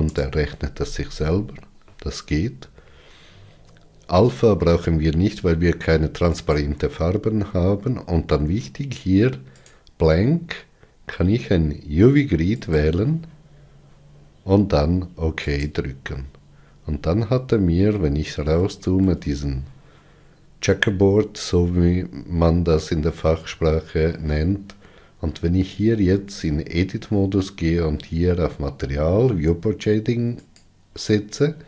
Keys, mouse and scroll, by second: 26.1 Tab, 30.6 click.